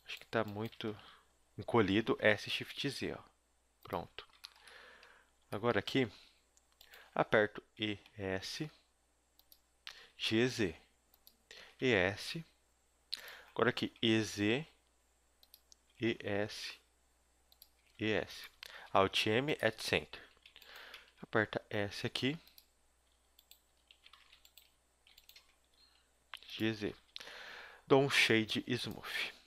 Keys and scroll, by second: 0.9 z, 2.2 s, 4.1 a, 7.7 e, 10.1 g, 11.5 g, 11.6 e, 14.0 e, 15.8 e, 17.7 e, 18.9 alt+m, 19.7 a, 20.2 z, 20.9 z, 21.2 s, 24.2 ctrl+z, 25.6 g, 26.8 a, 27.0 a, 27.2 w.